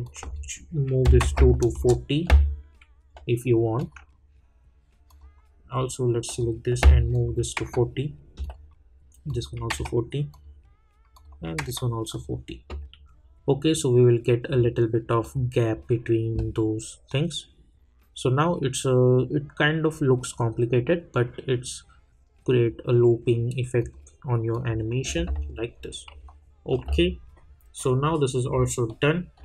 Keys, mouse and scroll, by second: 1.7 Return, 3.7 click, 15.2 click, 23.8 click, 25.4 scroll up 1, 26.2 alt+middle click, 27.4 scroll up 1, 28.1 scroll down 1, 28.8-29.4 alt+middle drag.